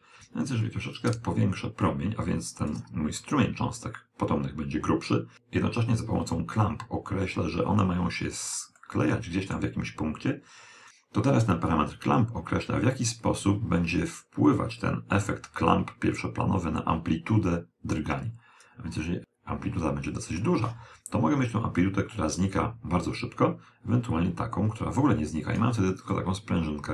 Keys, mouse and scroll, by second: 1.0 click, 3.3-5.0 middle drag, 8.9-10.6 middle drag, 11.7 click, 19.2 click, 24.1 click, 26.2-26.9 middle drag.